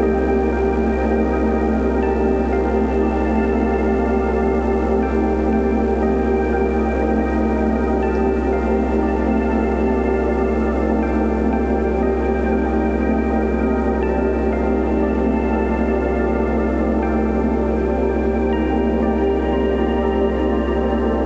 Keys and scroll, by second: 9.3 2, 9.6 Return, 9.6 5.